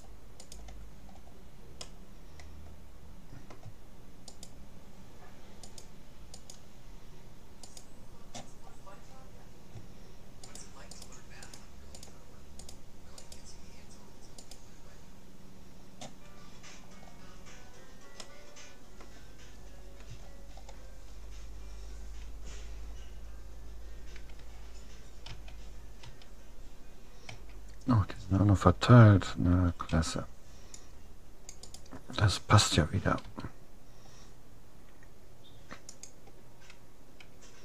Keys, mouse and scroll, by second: 1.0 middle click, 1.8 click, 2.2-3.6 middle drag, 4.4-6.6 right drag, 6.6-9.1 middle drag, 9.1 right click, 10.6-16.2 right drag, 16.6-21.8 middle drag, 21.8-23.0 drag, 25.4 a, 26.2 a, 27.4 a, 30.0 c, 33.2 g.